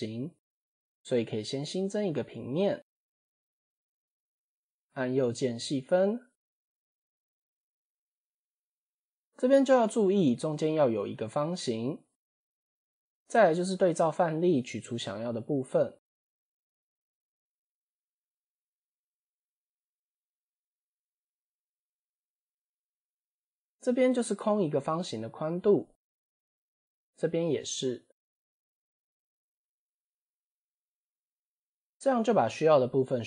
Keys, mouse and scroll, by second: 0.1 shift+middle click, 0.6 Tab, 1.8 shift+a, 4.5 Tab, 5.2 right click, 6.9 click, 7.2 click, 7.4 click, 7.5 click, 8.3 click, 9.3-9.8 scroll up 4, 12.2 click, 12.6 scroll down 2, 13.4 3, 17.0 click, 17.9 ctrl+click, 18.7 ctrl+click, 20.4 ctrl+shift+click, 20.8 ctrl+shift+click, 21.6 ctrl+shift+click, 22.2 shift+click, 23.2 shift+click, 25.2 shift+click, 25.6 shift+click, 26.0 shift+click, 26.5 shift+click, 27.9 shift+click, 28.2 shift+click, 28.6 shift+click, 29.0 shift+click, 29.3-30.3 shift+drag, 30.7 shift+click.